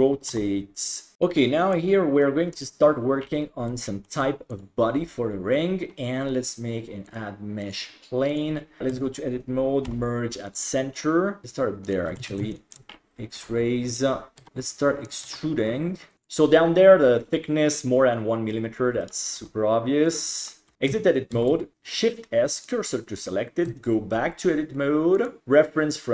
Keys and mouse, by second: 0.3 r, 1.1-1.9 middle drag, 4.1 shift+middle click, 4.6 click, 7.2-8.4 drag, 8.9 Tab, 9.9 m, 11.4 g, 12.2 alt+z, 12.7 shift+middle click, 13.4 g, 14.4 e, 15.3 e, 16.1 g, 19.0 right click, 19.4 g, 20.4 right click, 20.7 Tab, 21.4 shift+s, 23.7 Tab, 25.2-26.1 drag.